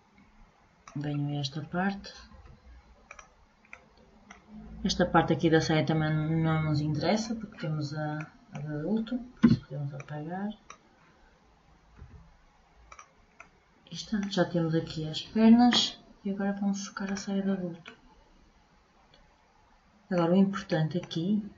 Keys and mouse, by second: 11.5 Delete.